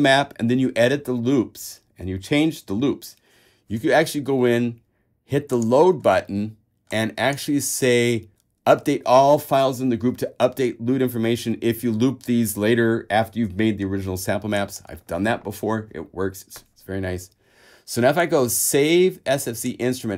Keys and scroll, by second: 4.4 super+a.